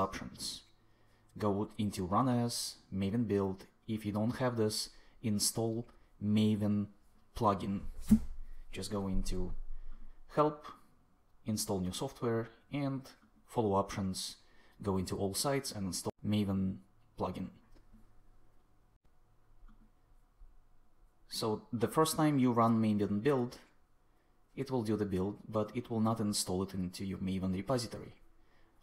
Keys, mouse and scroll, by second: 4.7 click.